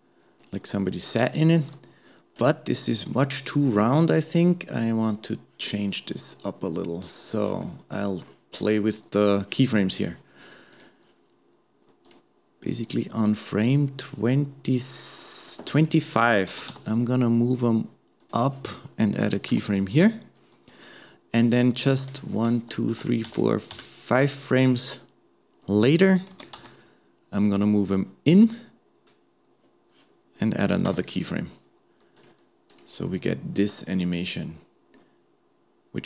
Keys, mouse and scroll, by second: 2.5-4.4 middle drag, 4.4 click, 5.1-7.2 scroll down 1, 7.2 click, 7.6-10.7 middle drag, 10.7 click, 12.1-13.6 drag, 14.1-16.5 drag, 16.5 g, 22.5 Right, 22.7 Right, 26.3 g, 32.2 click, 32.7-35.9 drag.